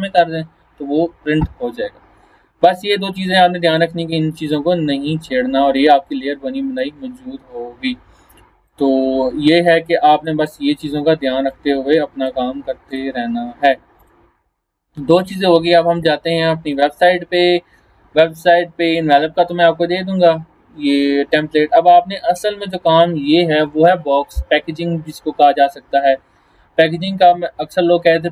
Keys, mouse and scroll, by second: 2.7-7.0 drag, 17.7 scroll down 1, 18.1 scroll up 1, 22.7 click.